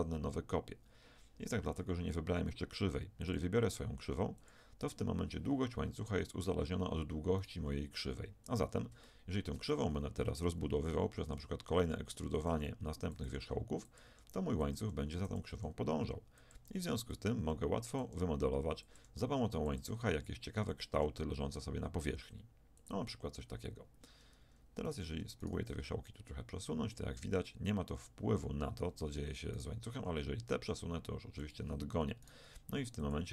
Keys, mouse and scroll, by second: 3.3-5.9 drag, 7.4-9.1 right drag, 9.1 click, 9.7 Tab, 12.3-19.8 typing, 21.9 e, 24.9-26.7 right drag, 25.8 g, 29.5 click, 30.0 g, 31.3 click, 32.3 click, 32.5 g.